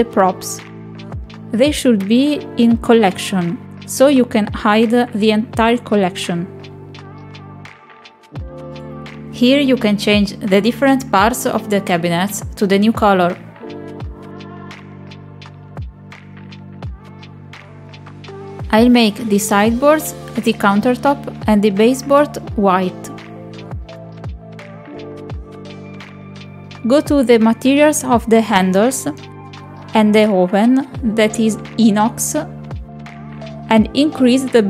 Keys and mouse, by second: 3.8 click, 8.5 click, 9.6-11.9 drag, 13.7-15.1 drag, 15.2 click, 15.9-18.0 drag, 19.7-20.8 drag, 21.8-24.1 drag, 25.1 click, 27.3 middle click, 28.4 shift+middle click, 29.1 middle click, 29.9 shift+middle click, 30.9 shift+middle click.